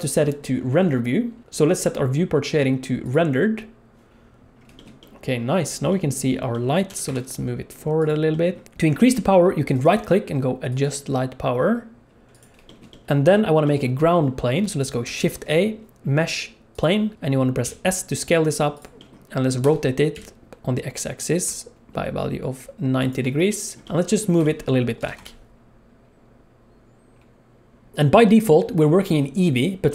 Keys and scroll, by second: 6.9 g, 15.0 shift+a, 17.6 s, 19.6 r, 25.0 g.